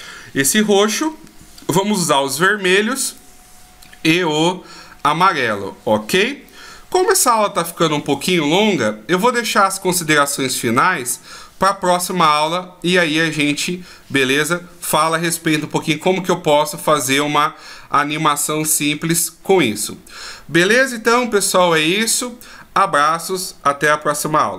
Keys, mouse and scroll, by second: 2.7 middle click, 6.6-7.1 shift+scroll down 1, 10.5 middle click.